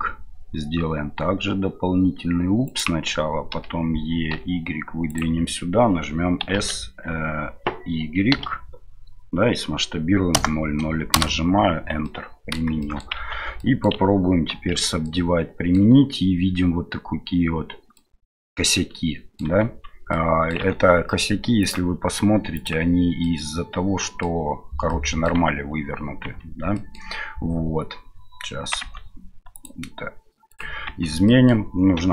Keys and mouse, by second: 12.1 middle click, 12.9 middle click, 13.1 Tab, 13.6 middle drag, 15.0-15.8 middle drag, 17.9-19.4 middle drag, 19.6 Tab, 20.1 middle click, 21.7-23.0 drag, 23.2-24.2 middle drag, 24.9-25.3 middle drag, 26.2 Tab, 26.7 middle click, 29.5-30.7 drag, 31.2 middle click, 31.9 a.